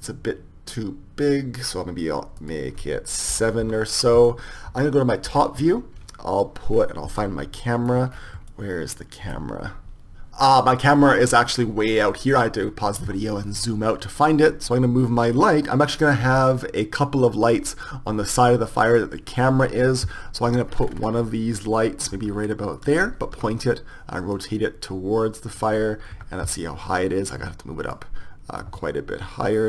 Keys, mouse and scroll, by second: 1.0 middle click, 2.4-4.4 drag, 5.4 KP_7, 14.6 right click, 16.2 g, 22.1-23.3 middle drag, 22.1 g, 23.3 r, 26.1 KP_1, 27.4-28.7 drag.